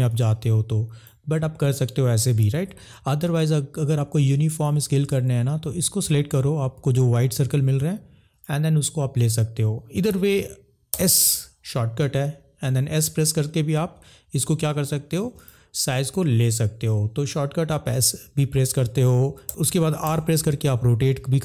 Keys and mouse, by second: 0.0 click, 2.6 ctrl+z, 7.0 click, 10.3 ctrl+z, 10.9 s, 15.4 click, 19.4 e, 20.0 r.